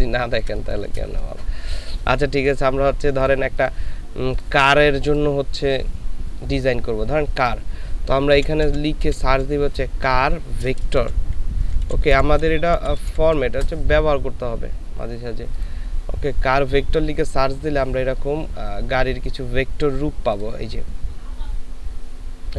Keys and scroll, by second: 2.6 ctrl+space, 8.8 typing, 10.5-13.1 typing, 13.5 Return.